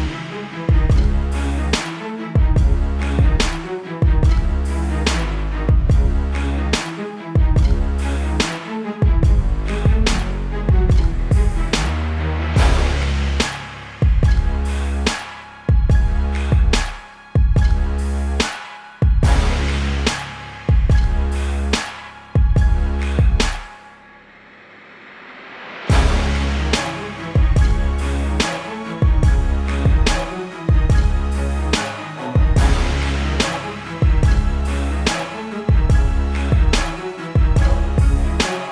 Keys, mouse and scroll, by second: 6.3 click, 14.8 click, 17.4 click.